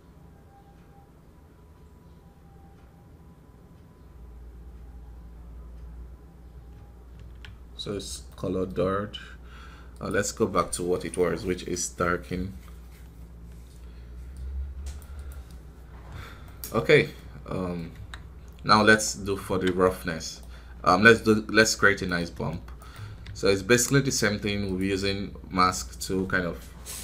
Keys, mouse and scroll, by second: 0.8-2.2 scroll down 1, 2.8-4.2 scroll down 1, 4.7-6.0 scroll down 1, 7.6 scroll up 2, 8.2-15.2 middle drag, 15.7-16.3 scroll down 7, 16.3 middle click, 16.7 scroll up 2, 17.1 middle click, 17.8 KP_1, 19.7-24.0 right drag, 24.0 shift+d, 25.7-27.0 drag.